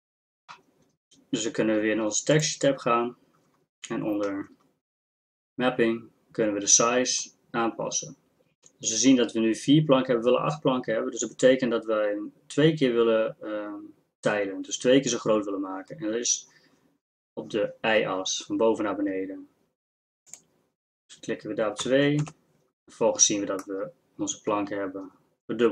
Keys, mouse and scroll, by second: 2.4-4.2 drag, 23.7-25.7 middle drag.